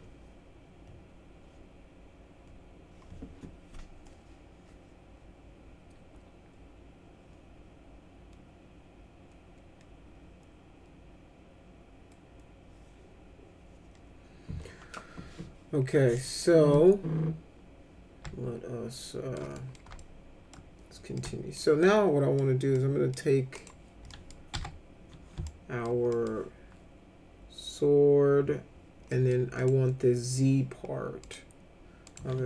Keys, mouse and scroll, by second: 15.9 middle click, 16.7-19.3 middle drag, 19.5 middle click, 20.0 alt+middle click, 21.2 alt+middle click, 21.8 middle click, 22.7 middle click, 23.5 click, 24.1 middle click, 24.5 F4, 25.4 alt+middle click, 26.1 middle click, 29.1 middle click, 29.5 click, 31.2 click, 32.0 click.